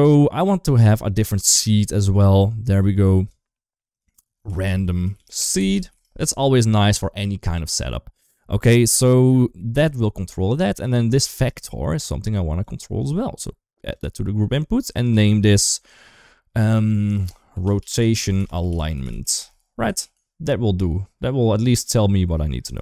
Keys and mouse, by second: 1.1 click, 1.2-3.1 drag, 3.9-5.8 drag, 5.6 e, 6.4 ctrl+s, 6.8 click, 9.2 shift+middle click, 10.6 shift+middle click, 11.2 shift+middle click, 12.5-13.8 drag, 14.7-19.2 drag, 19.9 ctrl+s, 21.6-22.6 drag.